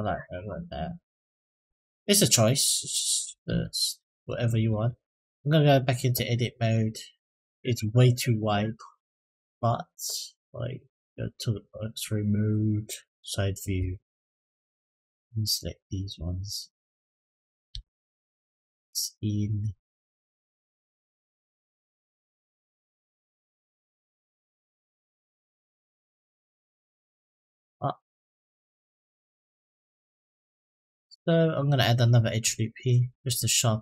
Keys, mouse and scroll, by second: 0.3-0.8 middle drag, 1.3-2.1 scroll down 3, 2.1 middle click, 2.8 click, 3.2 s, 4.3 ctrl+z, 4.7 Tab, 6.4 click, 7.4 click, 11.5 click, 12.6 click, 14.2 click, 15.1 click, 16.5 click, 17.5 s, 20.9-23.5 drag, 23.9 click, 25.1 s, 26.8-30.9 drag, 32.9 click.